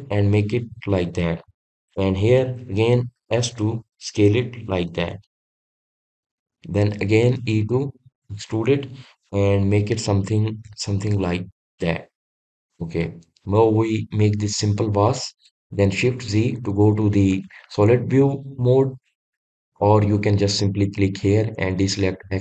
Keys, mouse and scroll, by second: 13.1-16.4 middle drag, 16.4 shift+z, 17.3 click, 18.3-22.4 middle drag.